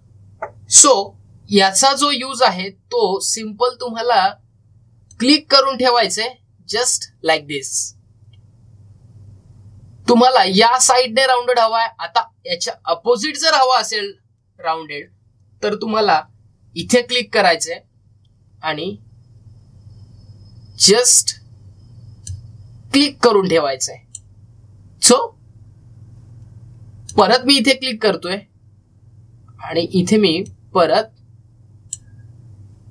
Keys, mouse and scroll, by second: 6.0-10.0 drag, 17.7 click, 23.1-27.9 drag, 31.3-32.9 drag.